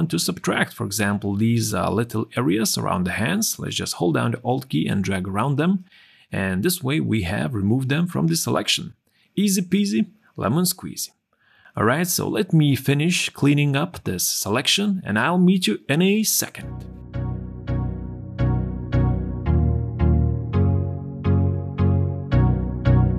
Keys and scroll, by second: 6.5 q, 8.0 q, 16.8 q, 17.8 q, 18.1 q, 18.8 q, 19.6 ctrl+0, 20.1 space, 20.4 q, 20.8 l, 22.9-23.1 typing.